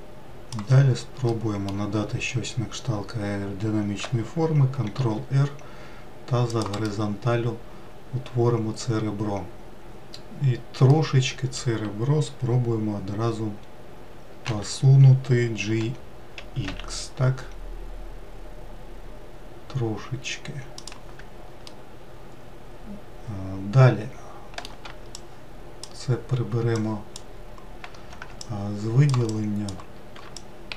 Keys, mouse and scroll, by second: 1.6-4.7 middle drag, 5.3 ctrl+r, 11.2-14.4 middle drag, 14.8 g, 22.0-25.0 middle drag, 25.4 shift+click, 27.1-29.6 shift+drag, 30.6 ctrl+click.